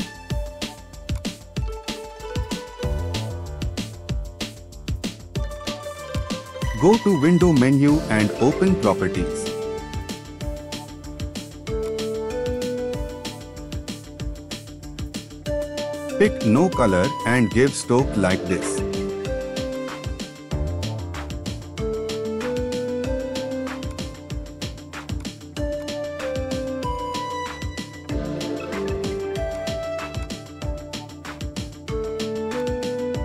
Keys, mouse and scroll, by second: 31.7 ctrl+t.